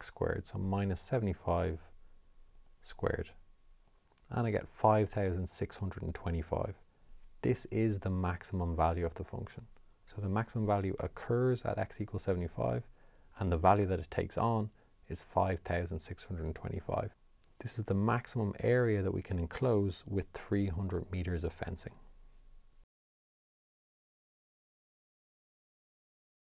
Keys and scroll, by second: 0.8 5, 3.6 Return.